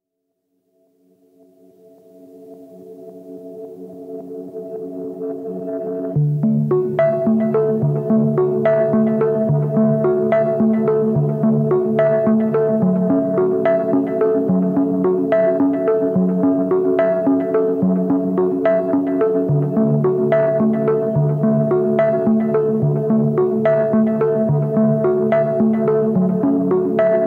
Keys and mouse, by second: 0.9 a, 1.4 Tab, 1.6 q, 3.3-4.0 drag, 4.0 click, 4.2 click, 4.4 drag, 6.3 click, 7.3 click, 7.9 drag, 8.4 shift+click, 8.9 Tab, 10.8 shift+click, 11.9 ctrl+b, 13.4 Tab, 14.0-14.7 drag, 14.7 middle click, 15.7-17.2 drag, 18.6-19.5 shift+drag, 19.7-20.0 drag, 21.1-22.1 drag, 22.4 ctrl+z, 22.6 ctrl+z, 23.2 ctrl+z, 23.4 ctrl+z, 23.6 ctrl+z, 23.9 ctrl+z, 24.1 ctrl+z, 24.6 ctrl+z, 25.0 ctrl+z, 25.6 shift+drag, 26.7 shift+drag.